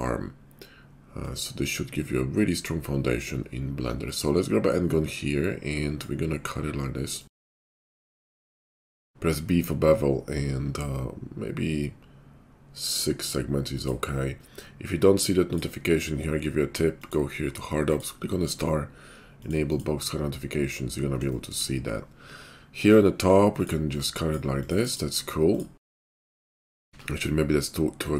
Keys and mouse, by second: 1.2-23.6 drag, 23.6 middle click, 24.0-28.1 drag, 26.9 ctrl+z.